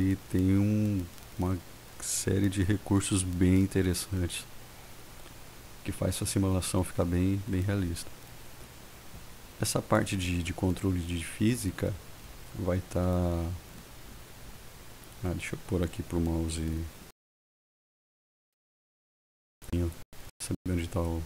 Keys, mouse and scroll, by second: 18.5 click, 19.9 click.